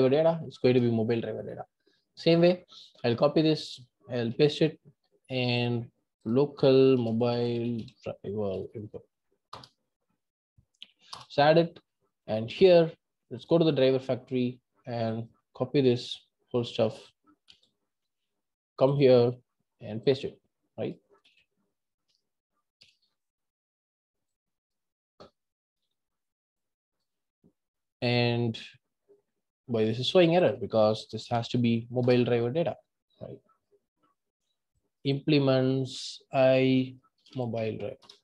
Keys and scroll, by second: 2.9 super+c, 38.1 Return.